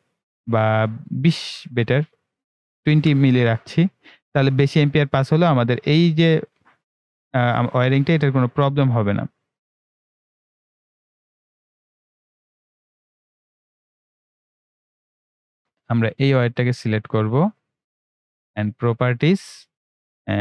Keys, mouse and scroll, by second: 7.8-8.2 ctrl+scroll up 1, 9.3-9.7 ctrl+scroll up 1, 9.7-18.0 drag, 18.0-18.4 ctrl+scroll down 1, 19.0-20.4 drag.